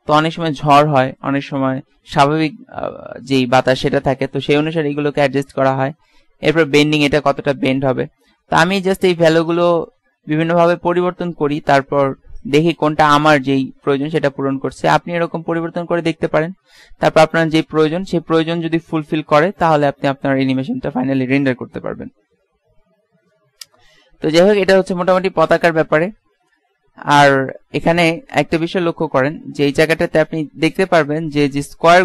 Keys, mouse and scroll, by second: 9.9-11.9 drag, 15.0 alt+a, 25.1 Escape, 29.1-30.5 drag, 31.7-32.0 middle drag.